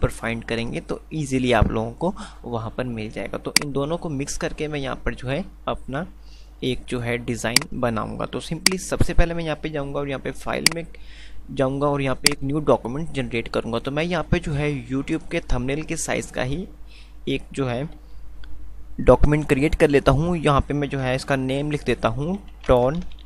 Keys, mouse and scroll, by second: 3.8 click, 7.5 click.